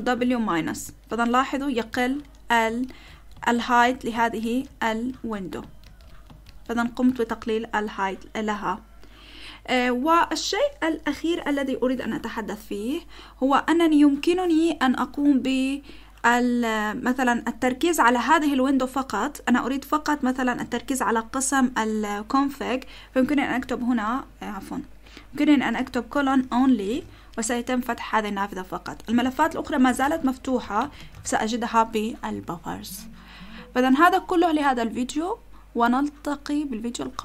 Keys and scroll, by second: 0.4-6.7 typing, 1.1 ctrl+w, 1.9 ctrl+w, 2.9 ctrl+w, 3.5 ctrl+w, 4.4 ctrl+w, 5.8 ctrl+w, 6.5 ctrl+w, 23.5 o, 24.9 Escape, 25.5-27.1 typing, 28.9-31.4 typing.